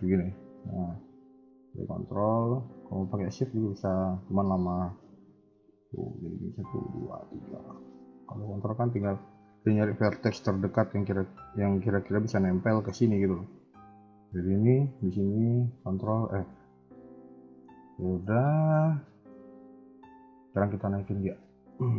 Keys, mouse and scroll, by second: 0.2 ctrl+z, 0.9 a, 1.1 a, 1.5 click, 3.0 a, 3.2 a, 3.4 click, 4.2 shift+click, 5.6 click, 6.6 shift+click, 7.7 a, 7.8 a, 8.1 click, 15.5 ctrl+click, 16.0 f, 16.4 KP_1, 16.6 KP_3, 17.4 shift+middle click, 17.7 middle click, 18.2 scroll up 1, 18.3-19.3 scroll down 3, 18.7 middle click, 19.3 KP_1, 19.5 KP_3, 19.8 middle click, 20.8 click, 21.4 shift+middle click.